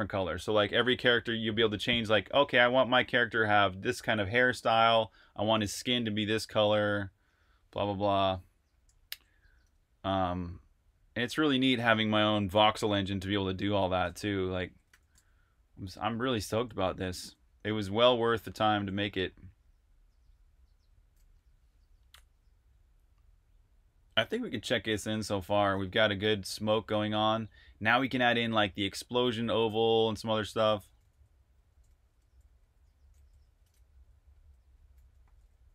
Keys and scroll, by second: 9.4 super+Tab, 14.2-18.4 typing, 20.6 typing, 26.2 super+r, 26.5-27.4 typing, 30.8-35.7 typing.